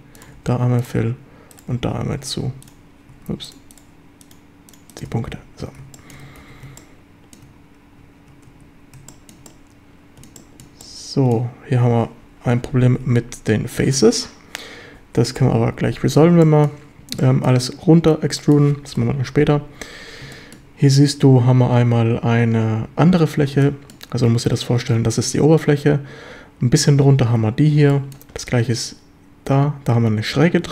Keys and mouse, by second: 0.3 f, 2.4 shift+f, 2.6 shift+right click, 5.1 f, 5.3 a, 5.9 shift+middle click, 6.4 ctrl+s, 6.8 shift+click, 8.5 Tab, 9.1 shift+drag, 9.5-10.2 drag, 10.1 middle click, 10.4 shift+drag, 10.8-11.3 drag, 15.4 KP_7, 15.8 Tab, 16.4 shift+click, 17.2-17.5 drag, 18.4 click, 18.9 KP_7, 20.3 shift+drag, 23.6 shift+drag, 27.9 shift+click.